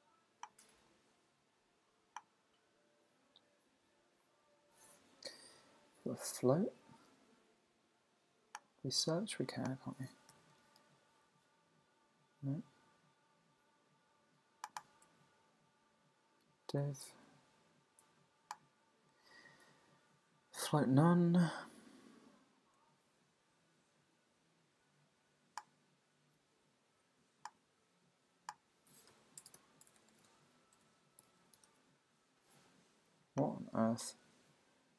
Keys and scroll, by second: 3.7 Down, 4.4 Up, 30.7 Tab.